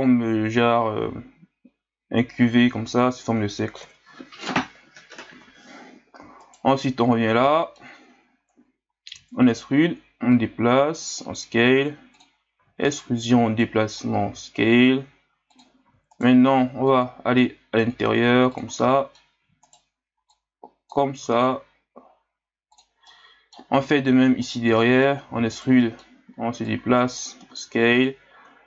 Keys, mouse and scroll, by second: 3.8 KP_1, 6.4 alt+right click, 7.2 ctrl+scroll up 1, 7.5 middle click, 8.2-9.1 scroll up 1, 9.1 e, 10.3 click, 11.3 s, 12.6 e, 13.6 click, 14.3 s, 15.9 e, 16.9 click, 17.8 s, 18.8 middle click, 19.4 e, 20.3 click, 21.2 s, 23.1-24.4 middle drag, 24.4 alt+right click, 24.8 middle click, 25.3 e, 25.8 middle click, 26.6 click, 27.5 s.